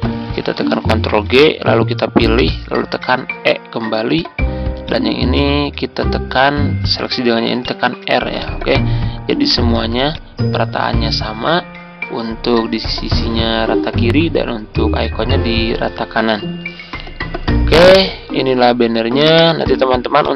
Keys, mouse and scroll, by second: 1.0 ctrl+g, 2.3 shift+click, 3.1 shift+e, 4.0 click, 7.5 shift+click, 8.3 click, 9.7 z, 10.1-18.0 drag, 18.2-19.6 ctrl+scroll down 1, 19.6 z, 20.2 click.